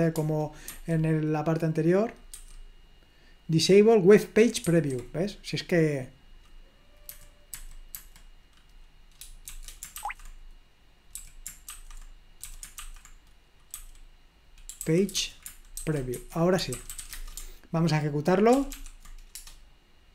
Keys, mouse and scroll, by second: 0.1 Escape, 1.3 super+2, 3.0 super+3, 4.9 super+1, 7.1-7.9 typing, 9.2-17.6 typing, 18.5 ctrl+p, 18.8 ctrl+p, 19.4 Return.